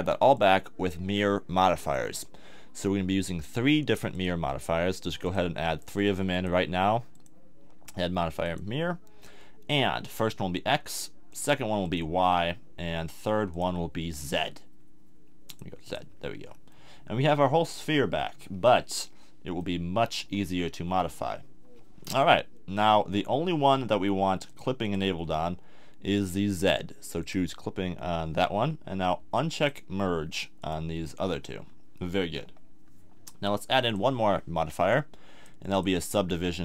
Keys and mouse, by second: 0.3-2.2 drag, 16.5-17.0 middle drag, 17.0-17.7 drag, 17.7-20.2 middle drag, 20.2 KP_1, 24.5-27.1 drag, 27.2-32.4 drag, 33.9-35.8 drag.